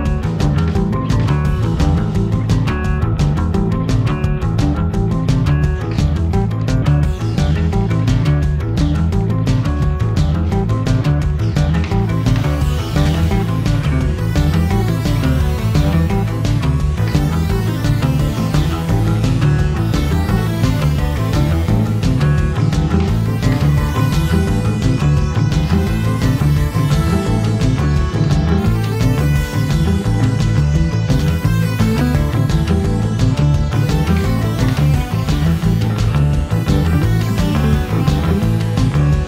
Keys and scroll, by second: 19.9 7, 20.2 ., 20.3 5, 20.6 Return, 24.5 7, 24.8 ., 25.0 7, 25.2 5, 25.4 Return, 36.3 Escape, 37.0 d.